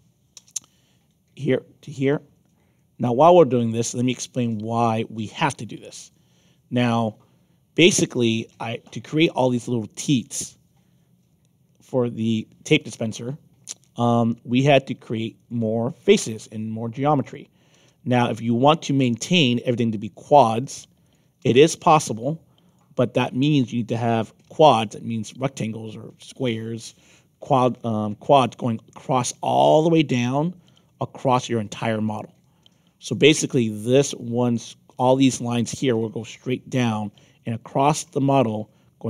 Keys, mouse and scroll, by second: 0.3 Return, 3.4 click, 4.6 click, 5.1 Return, 6.9 click, 8.0 click, 8.5 Return, 12.9 middle click, 15.3 click, 17.2 click, 17.7 Return, 19.3 click, 21.0 click, 22.6 click, 24.1 click, 24.4 Return, 33.0 click, 34.4 click, 34.7 Return, 37.0 middle click, 37.9 middle click.